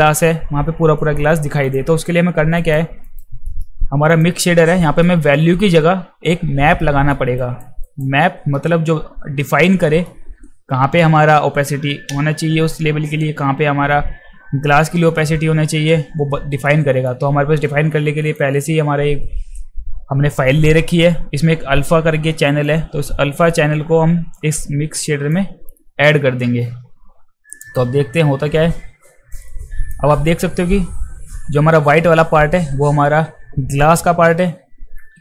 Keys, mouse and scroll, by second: 1.6 click, 2.6 alt+right click, 3.0 alt+right click, 3.4-4.0 alt+middle drag, 4.1 click, 4.8 alt+middle click, 6.8-7.1 alt+middle drag, 7.4 alt+right click, 7.8 alt+right click, 8.2 alt+middle drag, 9.4 alt+middle click, 16.7 alt+middle click, 18.3 click, 22.7-25.3 drag, 27.5 click, 29.3 alt+click.